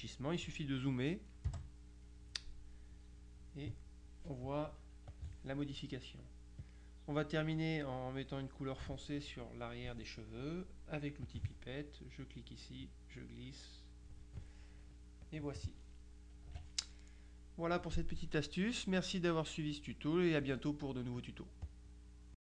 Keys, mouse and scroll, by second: 1.6 KP_Add, 2.1 click, 5.2 click, 6.7 click, 11.3 click, 12.9-14.7 drag, 15.3-16.2 drag, 16.5 KP_Subtract, 17.5-18.5 drag, 21.7 click, 22.4 click.